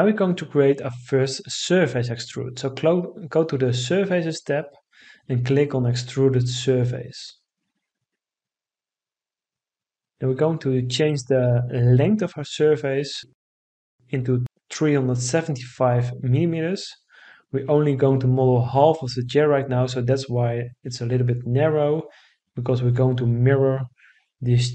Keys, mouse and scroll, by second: 13.1 3, 14.0 7, 14.5 5, 15.4 Return.